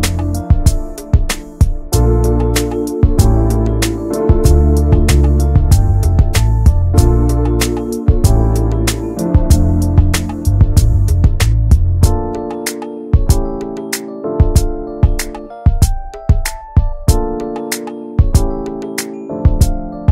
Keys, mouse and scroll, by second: 0.9 Delete, 1.1 middle click, 2.0 ctrl+s, 2.3 click, 2.9 /, 3.1 middle click, 3.5 Tab, 3.8 shift+middle click, 4.0 scroll up 1, 4.1-5.6 middle drag, 6.0 click, 6.3 middle click, 6.5 scroll up 1, 6.7 shift+middle click, 7.0 Tab, 7.2 click, 7.9 ctrl+a, 8.7 click, 9.1 Tab, 9.6 middle click, 10.5 click, 10.9 alt+shift+click, 11.3 alt+shift+click, 12.5 scroll down 2, 12.8 middle click, 13.3 scroll up 2, 13.9 alt+shift+click, 14.3 alt+shift+click, 14.8 shift+middle click, 15.0 scroll up 1, 15.4 ctrl+b.